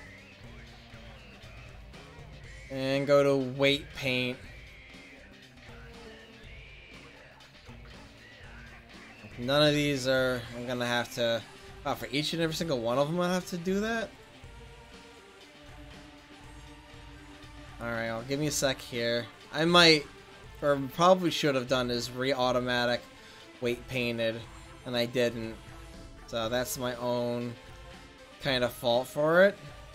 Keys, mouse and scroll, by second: 4.3 middle click, 7.2-9.9 right drag, 9.9-10.6 middle drag, 10.6-11.3 scroll down 1, 13.2 f, 14.3-14.8 drag, 17.1 right click, 18.0 f, 19.0 click, 25.2 right click, 25.5 drag, 26.2-27.3 drag, 29.0-29.9 drag.